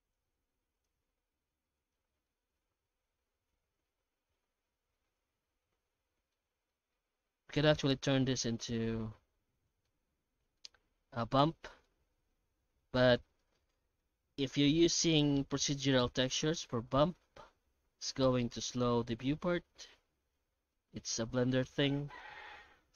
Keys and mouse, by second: 0.7 click, 5.5-6.3 middle drag, 6.7 shift+middle drag, 7.4 middle click, 8.5 middle drag, 9.3 ctrl+s, 9.9-12.3 middle drag, 13.5 middle click, 15.8 middle click, 17.1 middle click, 18.6-21.3 shift+drag, 21.8-22.2 middle drag, 22.4 ctrl+s.